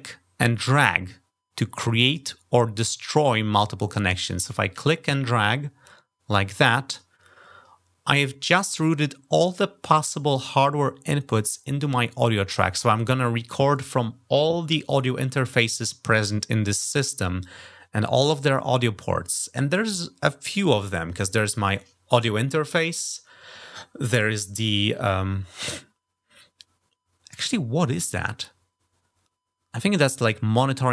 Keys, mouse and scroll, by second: 4.5-6.8 drag.